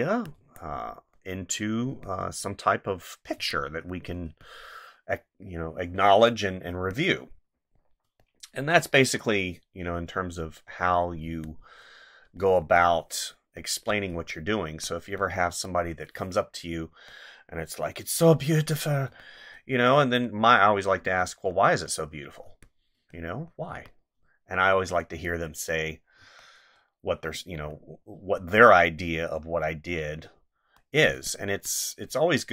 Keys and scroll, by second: 0.4 space, 1.9 space, 3.3 space, 6.7 space, 11.2 space, 12.6 space, 14.1 space, 15.5 space, 18.1 space, 22.4 space, 23.7 space, 26.2 space, 31.1 space.